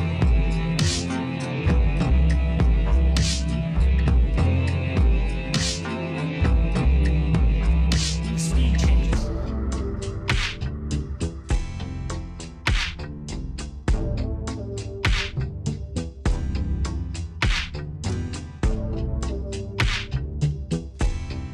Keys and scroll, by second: 6.8 space.